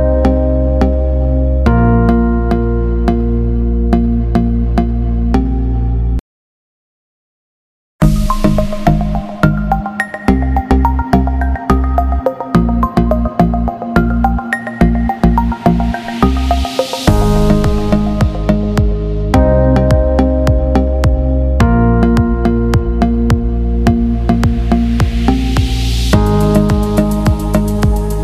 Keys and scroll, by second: 21.1 ctrl+g.